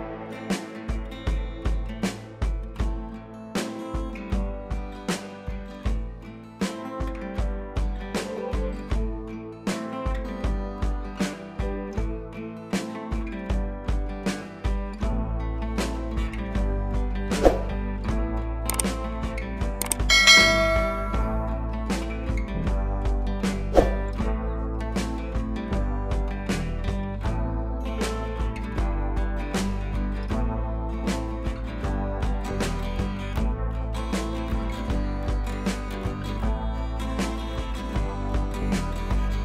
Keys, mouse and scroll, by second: 2.6 scroll down 1, 2.8 scroll up 1, 3.0 scroll down 1, 3.6 click, 6.0 scroll up 1, 7.1 click, 8.2 scroll down 1, 8.4-9.0 scroll up 1, 9.0 click, 12.4 click, 13.3 ctrl+i, 14.0 b, 14.8 [, 14.9 [, 15.0 click, 20.0 ], 20.2 ], 20.4 click, 21.4 scroll down 1, 21.7 scroll up 1, 21.9-22.5 scroll down 1, 22.5 click, 25.3 ctrl+shift+a, 26.5 click, 27.0 right click, 27.6 click, 28.2 ctrl+shift+a, 30.4 click, 32.1 scroll down 1, 32.3 scroll up 1, 33.7 scroll up 1, 36.0 scroll down 1, 36.4 click, 36.7-38.5 scroll down 1, 38.5 click.